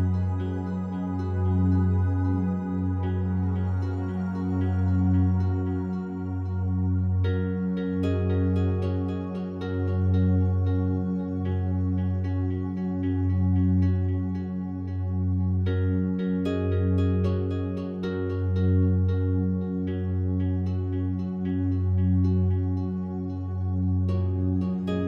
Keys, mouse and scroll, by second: 0.7 ctrl+s, 0.7 typing, 2.6 /, 3.7 alt+click, 5.2 click, 7.3 click, 8.6 click, 9.3 click, 14.4-17.1 alt+drag, 17.5 Tab, 18.2-19.5 drag, 20.3 click, 22.2 click, 23.2 click, 24.2 alt+click.